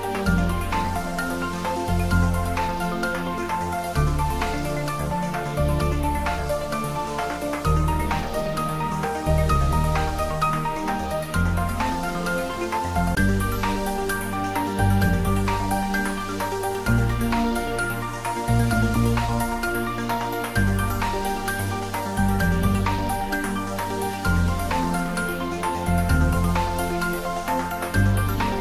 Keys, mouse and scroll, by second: 20.2 click, 28.4 click.